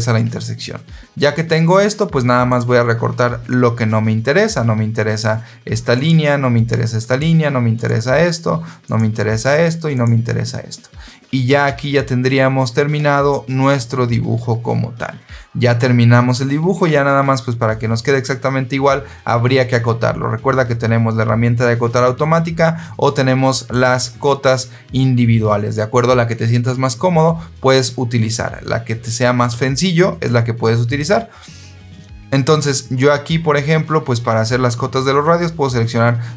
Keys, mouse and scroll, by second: 2.4 click, 5.8 click, 6.9 click, 7.7 click, 8.7 click, 9.8 click, 11.5 Escape, 23.6 click.